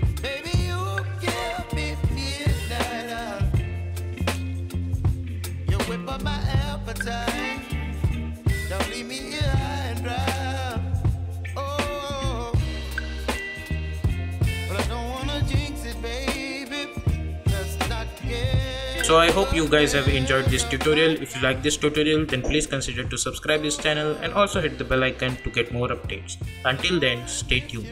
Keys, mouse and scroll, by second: 1.1 space, 3.5 space, 8.6 space, 9.1 click, 10.0 ctrl+y, 10.7 Return, 12.1-13.5 drag.